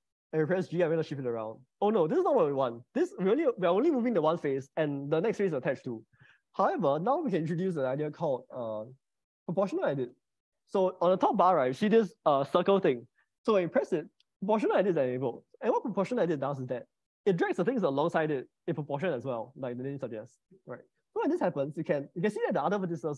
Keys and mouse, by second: 0.0 middle click, 1.1 g, 6.8 Escape, 16.7 middle click, 20.4 g.